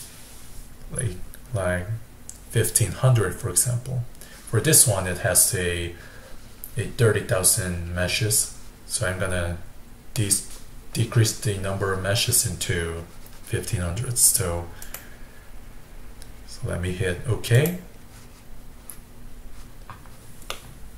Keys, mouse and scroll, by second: 20.5-20.9 middle drag.